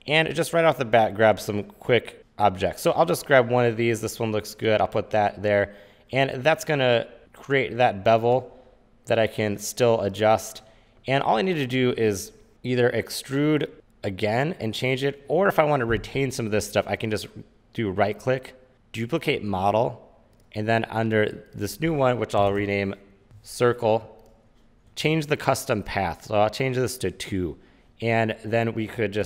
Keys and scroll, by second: 22.3-23.9 typing.